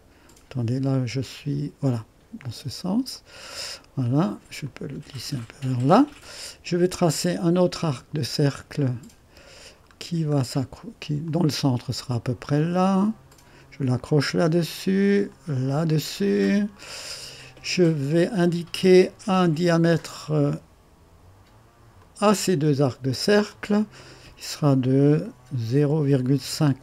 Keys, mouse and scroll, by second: 2.4 click, 3.1 right click, 4.6-5.9 drag, 8.8 click, 9.9 scroll down 2, 11.2 click, 13.3 click, 15.3 click, 16.1-16.7 scroll up 1, 16.9 right click, 18.0-18.8 scroll down 1, 18.8-19.9 right drag, 19.9 click, 22.0 click, 23.5 click, 25.7 ., 26.1 5, 26.4 Return.